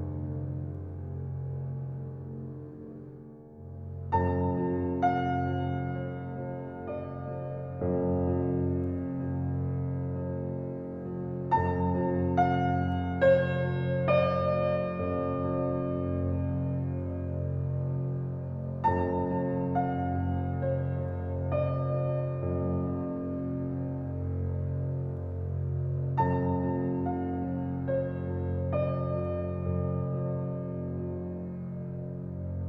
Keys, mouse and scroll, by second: 0.1-0.7 scroll down 1, 0.8 right click, 1.1 scroll up 1, 2.0 right click, 2.8 click, 5.1-5.7 scroll down 1, 7.0 right click, 7.8 click, 9.6 scroll down 1, 10.3 right click, 10.7-11.7 scroll up 1, 11.7 click, 13.8-14.5 scroll down 1, 18.4 scroll down 1, 18.9 scroll up 1, 20.9 scroll up 1, 21.3 click, 28.0-28.6 scroll up 1, 28.6 click, 29.8-30.8 typing, 31.0 Return.